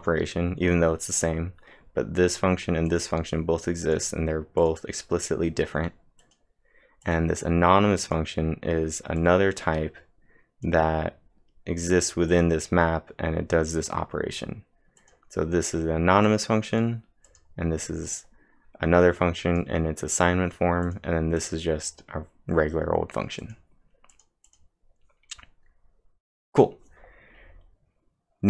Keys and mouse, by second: 0.0-0.4 typing, 7.1-14.8 drag, 14.8-15.5 typing, 15.0-16.3 drag, 16.3-18.1 drag, 18.4-19.6 drag, 21.7 click, 24.1 click, 24.5-26.9 drag.